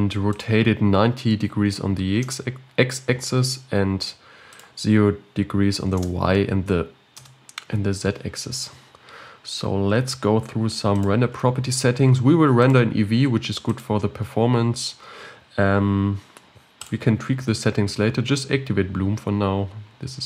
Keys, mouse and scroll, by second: 0.3-3.3 drag, 4.5 click, 6.0 Return, 11.3 click, 12.6-15.6 drag, 16.8-18.0 drag.